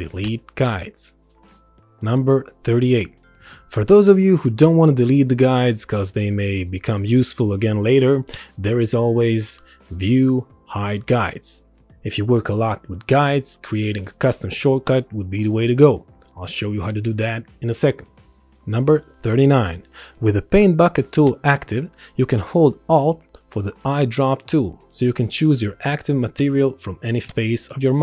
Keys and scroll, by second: 2.6 ctrl+z, 4.2 ctrl+1.